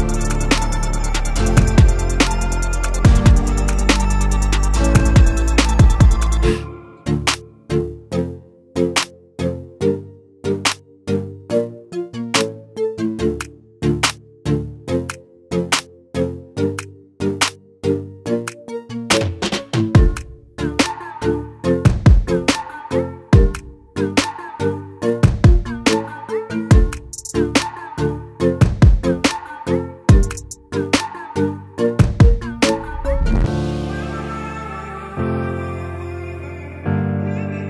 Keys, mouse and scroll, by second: 1.3-10.3 drag, 10.6 click, 15.2-19.7 drag, 20.1 click, 29.6-37.6 drag.